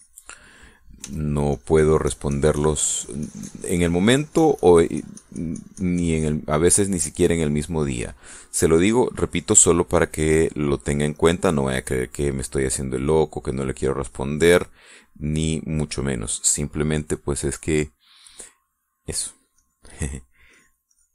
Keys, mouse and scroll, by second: 1.8 f, 2.3-7.3 drag, 11.1 click, 12.0 click, 13.9 click, 14.9-16.2 drag, 20.4 click.